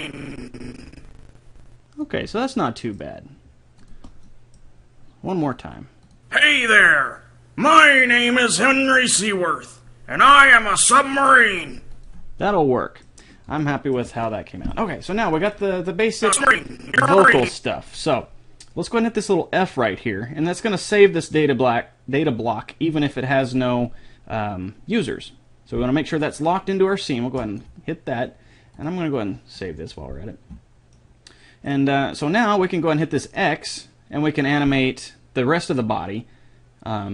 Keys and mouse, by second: 3.8 click, 12.0 click, 12.5 right click, 16.3-17.8 drag, 27.4-30.5 drag, 31.0-33.2 middle drag, 33.2-35.0 drag.